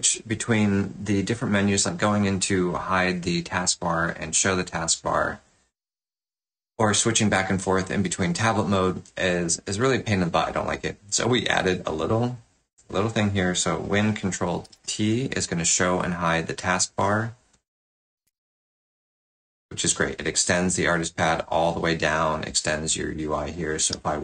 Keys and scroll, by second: 14.6 ctrl+super+t, 18.1 ctrl+super+t, 23.8 f.